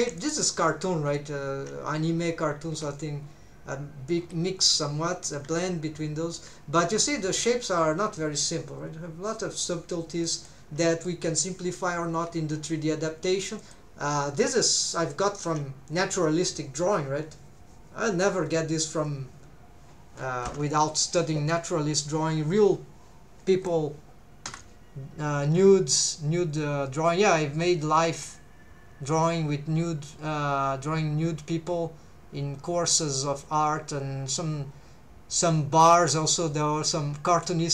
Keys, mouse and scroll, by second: 0.2 shift+middle click, 0.7 scroll down 2, 1.1 scroll up 2, 2.3-2.7 scroll down 2, 2.7 scroll up 2, 3.2 scroll down 2, 4.2-5.0 scroll up 2, 5.5 KP_3, 7.3 scroll down 1, 10.2 shift+middle click, 10.7 scroll down 1, 11.1 shift+middle click, 12.1 KP_1, 13.1 scroll up 1, 13.6 shift+middle click, 13.8 scroll up 1.